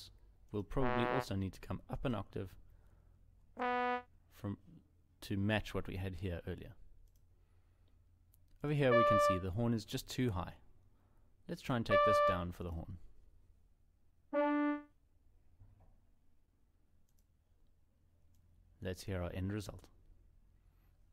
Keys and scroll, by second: 3.1 ctrl+Up, 13.8 ctrl+Down.